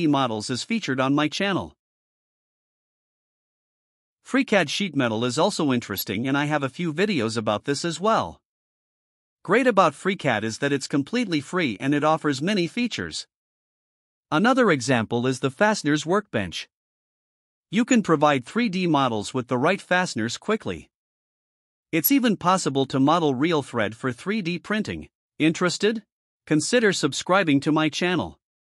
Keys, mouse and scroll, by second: 4.6 click, 4.8 click, 5.6 click, 6.1 click, 7.9 click, 8.7-9.1 drag, 9.3 right click, 9.8 middle click, 10.1-11.3 drag, 11.5-13.2 drag, 17.5 click, 20.4 click, 22.0 click, 23.6-24.6 drag, 25.7 click, 25.9 click, 27.3 click, 27.8 click.